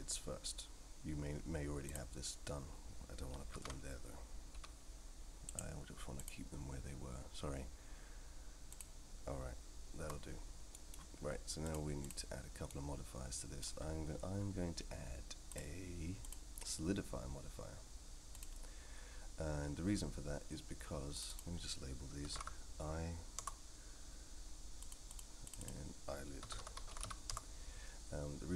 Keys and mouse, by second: 3.5 ctrl+z, 4.5 g, 6.3-10.1 drag, 10.7 middle click, 11.7 click, 12.7-13.6 middle drag, 16.2-18.4 drag, 21.3-23.6 drag, 22.4 e, 24.8 click, 25.1 click, 25.6-27.7 drag.